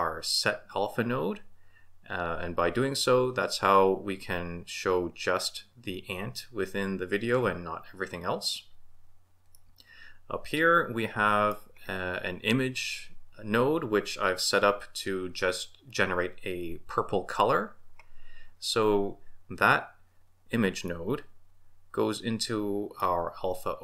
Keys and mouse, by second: 9.6-11.4 middle drag, 11.4 click, 20.9-21.2 drag, 21.2-23.0 middle drag.